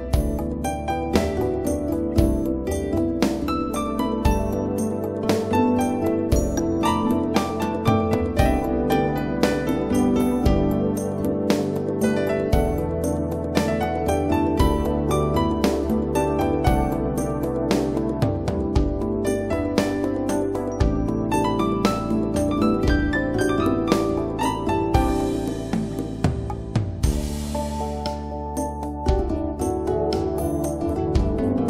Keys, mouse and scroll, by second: 1.2 click, 8.5 click, 11.7 click, 16.9 right click, 17.1 click, 18.1 scroll up 1, 18.6 scroll down 1, 20.5 scroll up 1, 22.4 scroll up 1, 26.8 click, 29.3-31.2 scroll down 1.